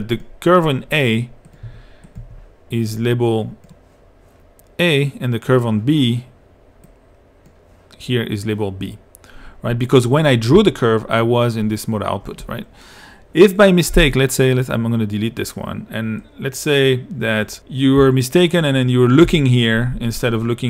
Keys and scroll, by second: 1.7 i, 19.3 i.